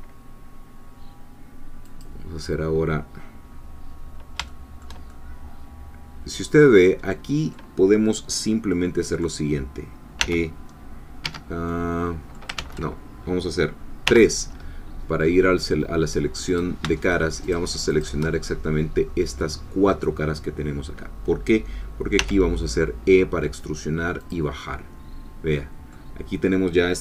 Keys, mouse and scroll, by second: 1.8 click, 4.5-10.2 shift+middle drag, 10.2 e, 11.2 Escape, 11.7 middle click, 12.6 ctrl+z, 14.1 3, 16.6 click, 17.0 shift+click, 17.5-18.7 shift+drag, 22.2 e, 24.2 click, 24.6-26.1 middle drag.